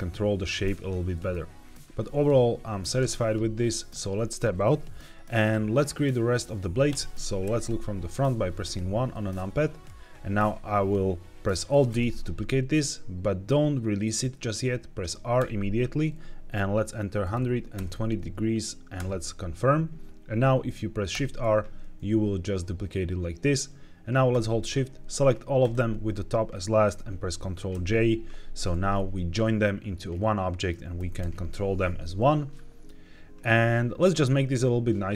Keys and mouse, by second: 1.0 middle click, 3.8 Tab, 6.8 KP_3, 7.3 KP_1, 9.0 shift+middle click, 9.2 shift+middle click, 11.8 alt+d, 15.3 r, 17.1 KP_1, 17.2 KP_2, 17.6 KP_0, 18.9 KP_Enter, 21.0 shift+r, 24.6 shift+click, 25.6 shift+click, 27.6 ctrl+j, 28.9-30.6 middle drag, 30.8 r, 31.1 y, 31.7 Escape, 32.4 middle click, 34.3 middle click.